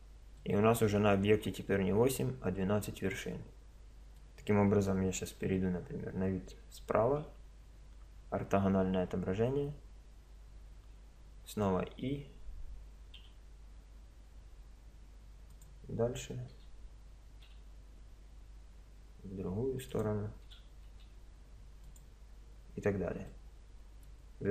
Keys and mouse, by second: 5.3 KP_1, 6.4 KP_3, 7.1 KP_5, 11.5 e, 16.5 e, 20.5 e, 23.3 middle click, 23.9-24.5 middle drag.